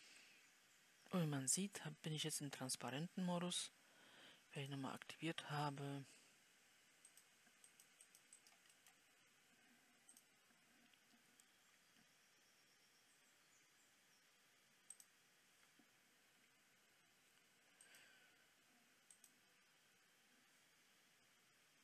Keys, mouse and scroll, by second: 0.4 w, 7.5-8.6 drag, 8.6-18.3 right drag, 18.3-21.8 drag.